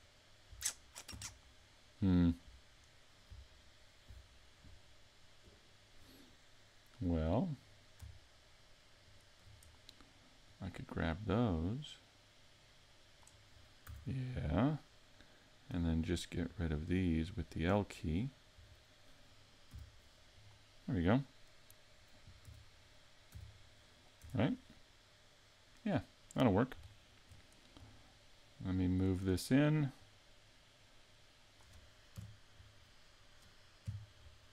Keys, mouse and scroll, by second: 7.6 right click, 9.0 shift+right click, 10.5 click, 13.9 a, 15.7 l, 16.3 l, 16.7 l, 17.4 l, 18.5 l, 19.7 x, 22.4 s, 23.3 z, 24.2 Tab, 24.7 middle click, 26.9 shift+middle click, 28.3 middle click, 28.6 middle click, 30.0 click, 32.4 KP_Decimal, 33.8 KP_5, 34.4 scroll down 3.